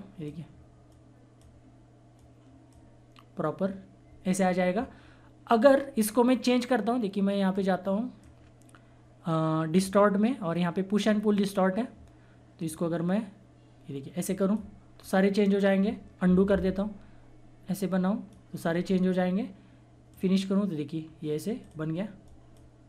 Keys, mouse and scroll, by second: 5.6 scroll up 1, 7.5 click, 12.6 click, 12.6-14.9 drag, 14.9 scroll down 1, 16.0 scroll up 1, 16.2 ctrl+z, 16.7-18.8 drag, 18.8 scroll down 1, 20.1 click, 20.9 scroll down 1, 21.5-22.8 drag.